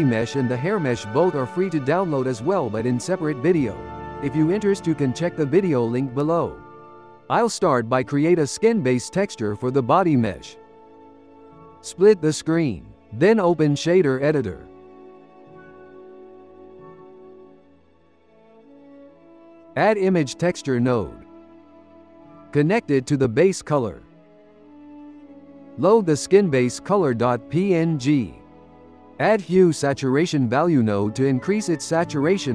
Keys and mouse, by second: 6.0 click, 7.5-10.1 drag, 10.3-12.5 right drag, 14.1-16.6 drag, 16.6 n, 17.3-19.0 shift+middle drag, 19.0 shift+a, 22.4 click, 23.7-25.4 ctrl+middle drag, 25.4 click, 28.9 click, 29.1 g, 29.7 click, 30.0 shift+a, 32.2-32.5 ctrl+middle drag.